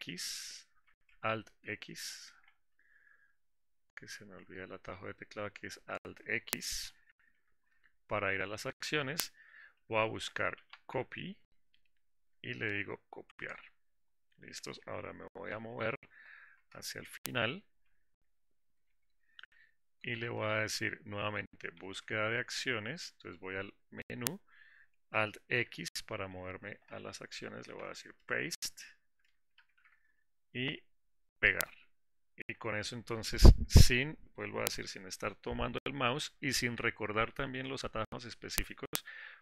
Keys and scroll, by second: 13.7 ctrl+Insert, 31.9 shift+Insert.